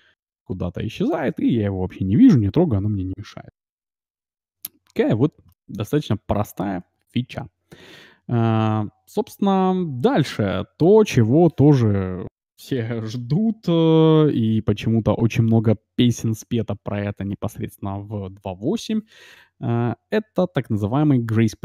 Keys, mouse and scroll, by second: 4.1 alt+b, 4.8-7.2 middle drag.